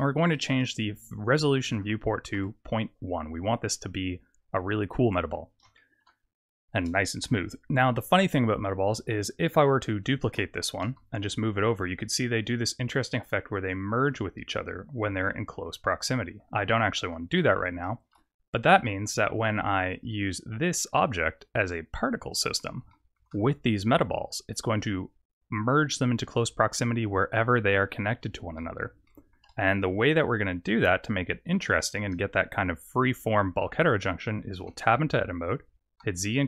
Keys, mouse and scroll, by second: 0.3 click, 5.7 shift+middle click, 8.7 scroll down 1, 10.2 shift+d, 16.6 ctrl+z, 17.8 shift+middle click, 18.5 scroll down 2, 18.8 middle click, 19.9 click, 22.9 shift+middle click, 28.5 middle click, 29.0 shift+middle click, 34.6 Tab, 36.0 z.